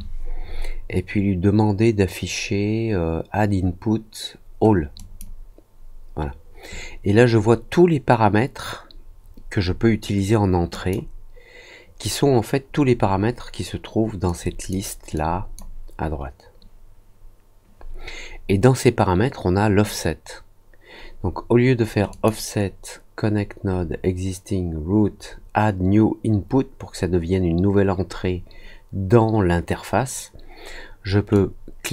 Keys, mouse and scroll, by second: 4.9 click, 10.7 click, 12.9 middle click, 14.2 click, 15.1-15.5 drag, 22.0 click, 31.3-31.9 drag.